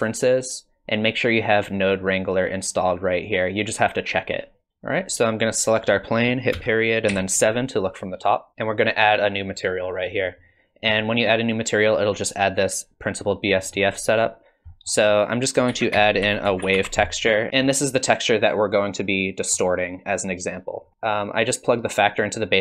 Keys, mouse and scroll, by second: 4.7 scroll up 4, 5.8 click, 6.5 KP_Decimal, 7.1 KP_7, 8.5 click, 9.6 click, 10.5 middle click, 13.7 middle click, 14.0 click, 14.7 middle click, 15.0 click, 15.7 shift+a, 17.5 alt+click, 18.5 click, 20.9 middle click.